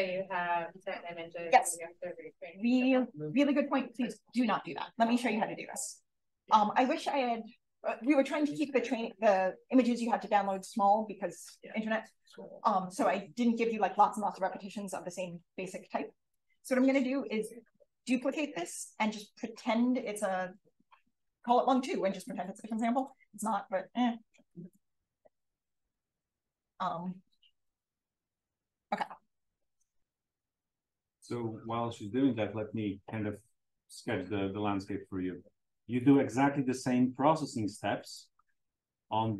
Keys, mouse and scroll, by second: 3.3-18.3 drag, 22.6 click, 24.2-25.1 typing, 26.1 click, 30.0 click, 33.0 click.